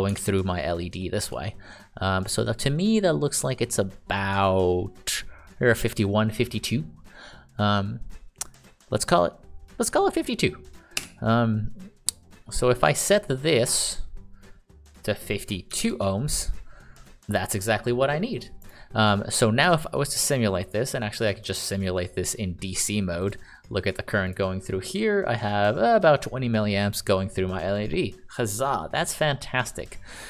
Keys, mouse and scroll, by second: 0.5 ctrl+d, 1.0-1.6 d, 11.4 Escape, 15.8-16.6 typing, 17.7 click, 19.0 click, 23.6 click.